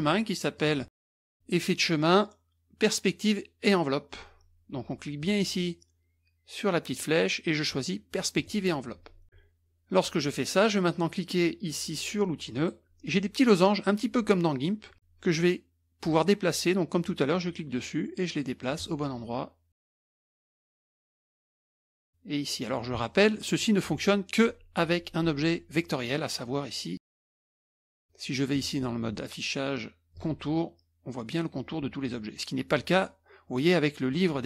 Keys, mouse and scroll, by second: 0.6 click, 1.3 click, 5.2 click, 6.9 click, 8.4-8.7 drag, 12.5 click, 17.3-19.0 drag, 19.8 click, 20.7 click, 21.7-22.8 drag, 23.2 middle click, 28.5 click, 30.1 click.